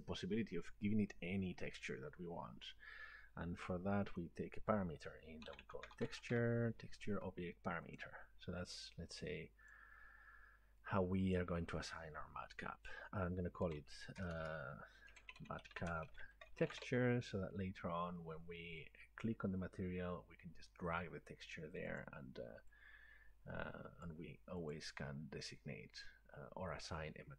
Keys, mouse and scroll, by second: 4.3 click, 5.3-6.9 typing, 8.0 click, 9.7 click, 11.4 click, 13.5-16.4 typing, 19.6 typing, 22.0 click, 24.0 click, 25.9 click.